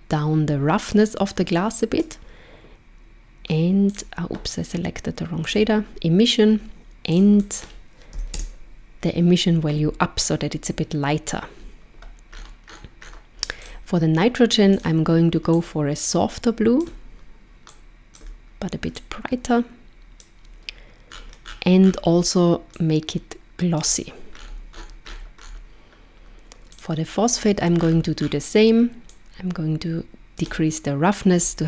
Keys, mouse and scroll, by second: 3.9 click, 7.1 click, 12.3-13.6 scroll up 12, 13.6 click, 14.8 click, 21.1-22.2 scroll down 10, 22.8 click, 24.4-25.7 scroll up 13, 26.7 click, 27.8-29.1 scroll down 8, 29.1 click.